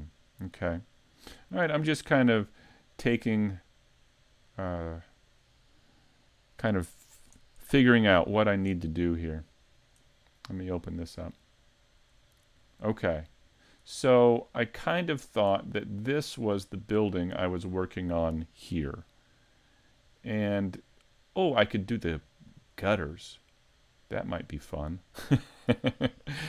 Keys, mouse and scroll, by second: 1.4 click, 2.9 click, 10.1 click, 12.2-13.0 scroll down 4, 12.7 middle click, 14.7 click, 15.7 middle click, 17.2 scroll up 2, 17.5 middle click, 20.0-20.4 scroll down 1, 20.6 middle click, 22.8 middle click.